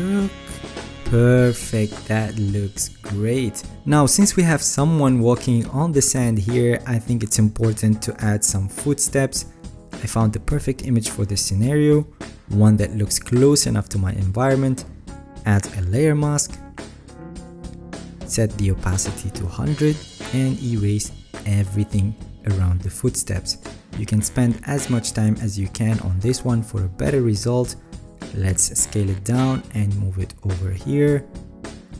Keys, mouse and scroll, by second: 0.8-1.5 alt+scroll down 4, 4.2-4.7 alt+scroll, 4.7 alt+scroll up 2, 4.8 alt+scroll, 5.1-6.2 alt+scroll up 8, 6.2-8.6 alt+scroll, 8.6 alt+scroll up 10, 17.4-19.1 alt+right drag, 25.3 alt+right click, 28.2 ctrl+t.